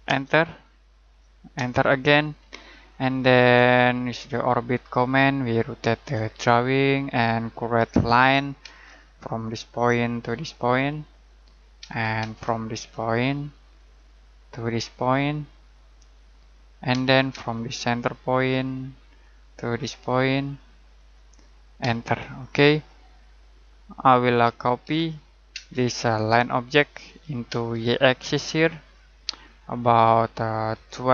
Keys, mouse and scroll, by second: 0.0 Return, 3.8 middle click, 6.3-7.0 scroll up 1, 7.0 middle click, 7.7 l, 8.6 space, 9.7 click, 11.7 space, 13.7 click, 14.2 middle click, 16.3 click, 16.9 space, 19.0 click, 21.7 space, 23.8 Escape, 24.3-25.5 typing, 26.0 click, 27.4 space, 27.9 click, 30.7-31.1 typing.